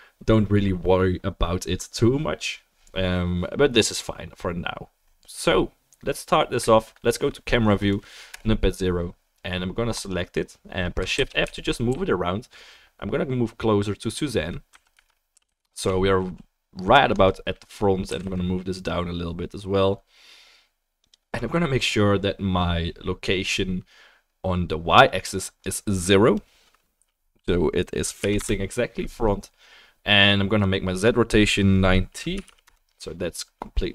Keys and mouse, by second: 8.3-10.1 drag, 8.3-33.9 right drag, 8.3 KP_0, 11.1 shift+f, 18.1 g, 25.6-33.9 drag.